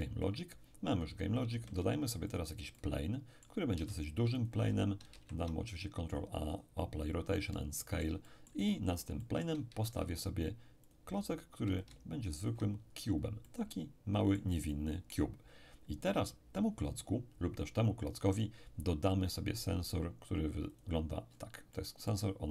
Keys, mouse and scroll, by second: 1.5 shift+a, 2.3 shift+click, 2.7-5.4 shift+middle drag, 3.8 s, 5.1 ctrl+a, 6.5-10.4 drag, 7.5-10.4 middle drag, 9.7 shift+a, 10.9-12.8 shift+drag, 12.8-13.4 ctrl+scroll up 2, 13.4-16.1 ctrl+middle drag, 19.6 click, 20.7 click, 21.3-21.7 scroll up 2, 21.7-22.5 middle drag.